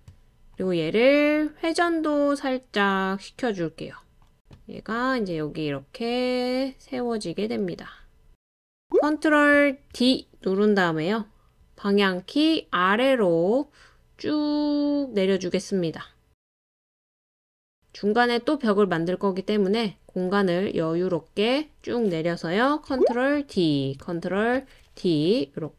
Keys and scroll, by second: 9.7 super+d, 11.2 Down, 11.2-20.3 Down, 22.5 super+d, 23.4 super+d.